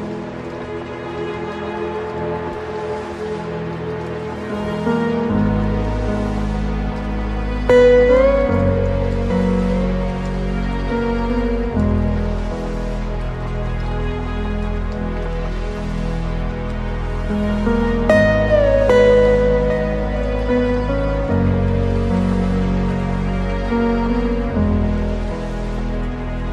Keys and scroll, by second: 0.0 ctrl+0.